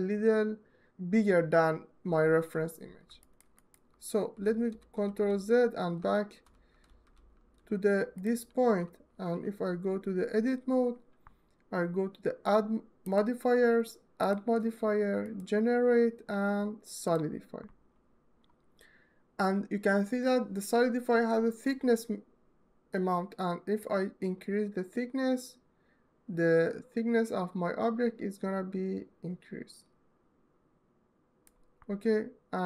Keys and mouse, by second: 3.1 ctrl+alt+middle click, 3.3 alt+middle click, 4.2 ctrl+z, 6.3 ctrl+shift+z, 7.9-8.8 drag, 8.8 Tab, 12.8 click, 13.9-31.3 drag.